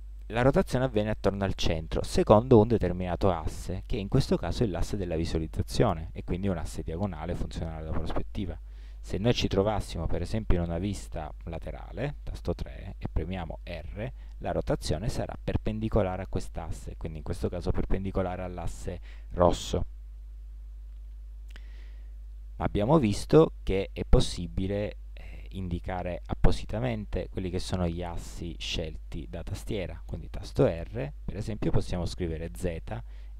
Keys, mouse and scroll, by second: 11.4 KP_3, 13.5 r, 21.2-30.6 middle drag, 30.6 r.